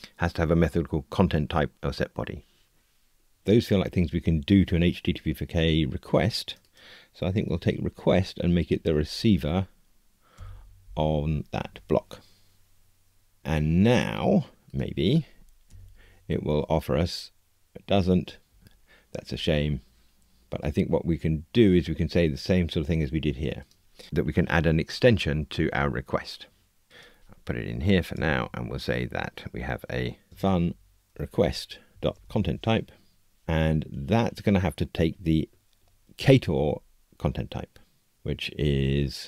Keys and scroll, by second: 7.4 super+c, 15.6 alt+Return, 18.8 Escape, 33.4 Tab.